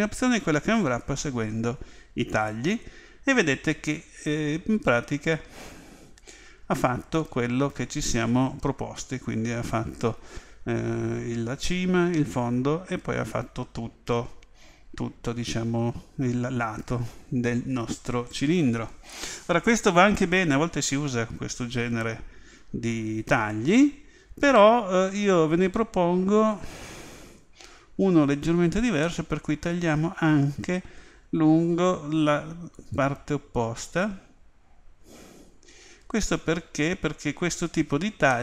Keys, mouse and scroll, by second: 25.1 a, 29.0-31.0 middle drag, 32.8-34.7 right drag, 36.1 click, 37.6 a, 38.3-38.4 middle drag.